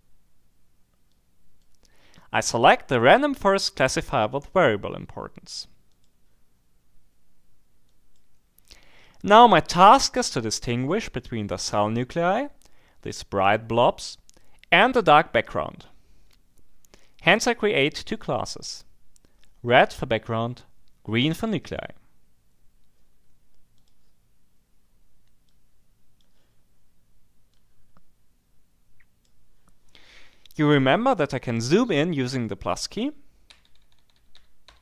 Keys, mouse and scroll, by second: 1.1 click, 5.9 click, 7.9-8.7 scroll up 2, 19.7-20.3 scroll up 2, 21.2 click, 23.8 click, 25.5-26.7 drag, 27.5-29.7 drag, 33.5 shift+=.